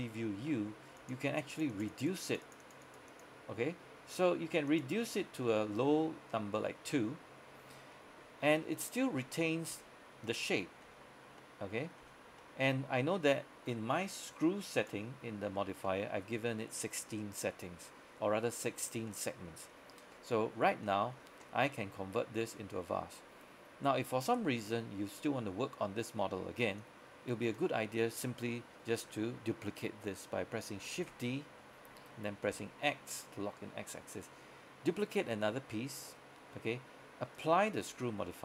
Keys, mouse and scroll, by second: 1.0 click, 7.0 middle click, 8.2 z, 8.7 middle click, 9.3 z, 10.4 middle click, 11.0 z, 11.5 middle click, 12.1 z, 12.5 middle click, 14.8 click, 15.9-20.7 middle drag, 20.7 scroll down 1, 20.9 middle click, 26.9 click, 31.1 shift+d, 32.6 x, 34.2-38.4 drag.